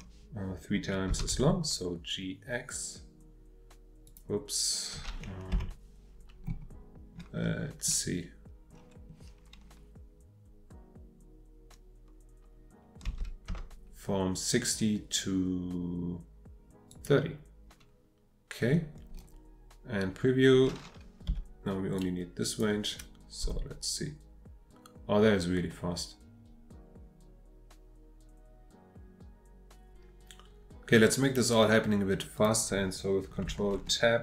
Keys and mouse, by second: 1.1 g, 1.3 x, 4.1 click, 5.5 F8, 13.0 g, 13.5 x, 16.9 click, 21.3 p, 23.4 space, 32.4 click, 33.7 ctrl+Tab.